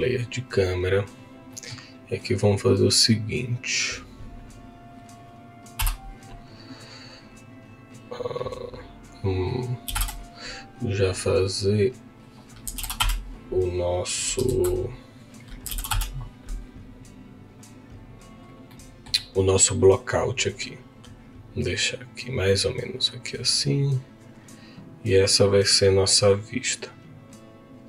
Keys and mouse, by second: 1.0 click, 1.5 middle click, 3.8-5.8 drag, 5.8 KP_0, 9.0-10.0 drag, 11.0-13.0 drag, 14.6 ctrl+z, 17.7 click, 18.7 middle click, 19.7-21.6 drag, 23.2 click.